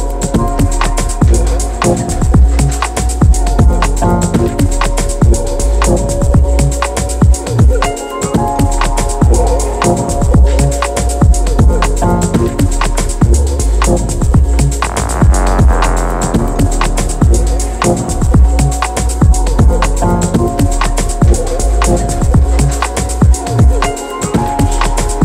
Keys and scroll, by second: 0.3-3.7 typing.